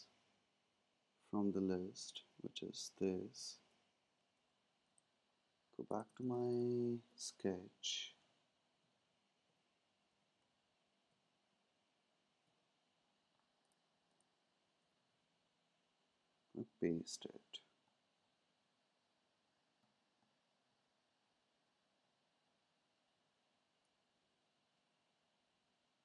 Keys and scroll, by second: 4.3 super+c, 5.0 super+Tab.